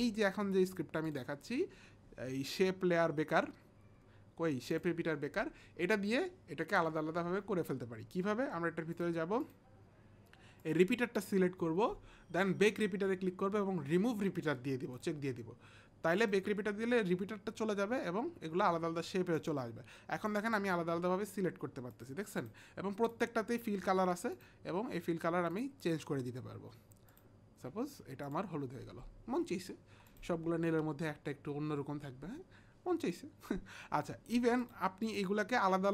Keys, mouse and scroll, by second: 4.7 click, 9.4 click, 10.6 click, 13.6 click, 14.9 click, 16.2 click, 19.4 click, 20.3 click, 21.9 click, 23.1 click, 24.3 click, 25.5 click, 28.2 click, 30.1 click, 34.6 click, 35.0 click.